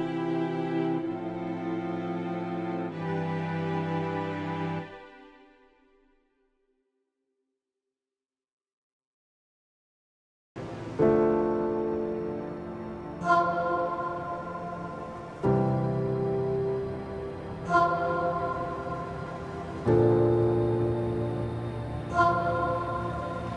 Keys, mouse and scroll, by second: 3.3-5.5 drag, 5.5-23.5 drag.